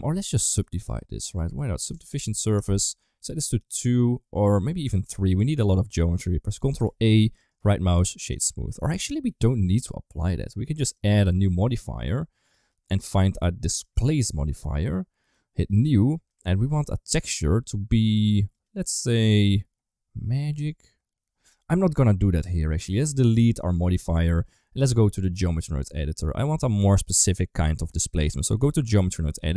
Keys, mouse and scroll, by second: 0.4-2.5 drag, 3.5-5.2 drag, 6.7 ctrl+a, 7.4 right click, 8.9 ctrl+z, 10.9-13.8 drag, 15.5 click, 16.2 click, 17.3-18.5 drag, 24.0 click, 25.3 click, 26.4-28.6 drag.